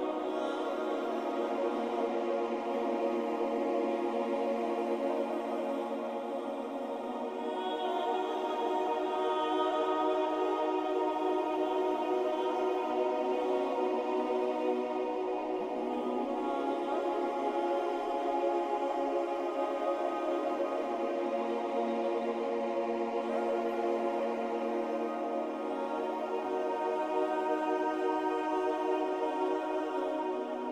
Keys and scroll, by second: 0.2 ctrl+y, 2.0 space, 2.5 alt+space, 3.1 ctrl+alt+space, 10.1 Down, 10.9 Up, 11.6 Up, 11.7 Up, 11.9 Up, 12.1 Up, 12.4 Up, 12.7 Up, 13.0 Down, 13.2 Down, 13.3 typing, 13.8 Up, 15.9 Down, 16.8 Up, 16.9 Up, 17.0 Up, 17.1 Up, 17.2 Up, 17.4 Down.